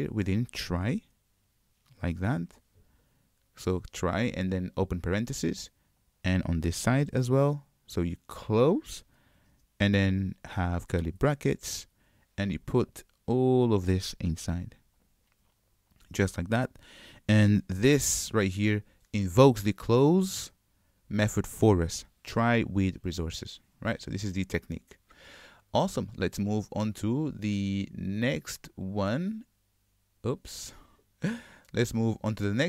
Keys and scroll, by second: 14.5 ctrl+x, 15.2 super+v, 18.0 super+y, 28.7 super+F8.